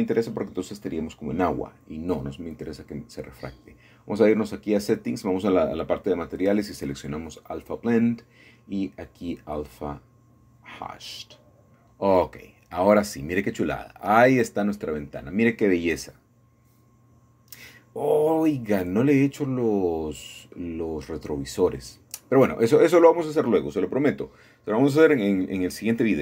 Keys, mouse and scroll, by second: 0.0 click, 1.0 scroll down 1, 1.9 scroll down 1, 2.0 scroll up 1, 2.7 scroll down 1, 4.4-5.6 drag, 5.8 click, 9.4-10.5 drag, 10.9 click, 18.2 middle click, 19.8-20.9 drag, 22.1 KP_8, 22.3 KP_5, 22.5 Return.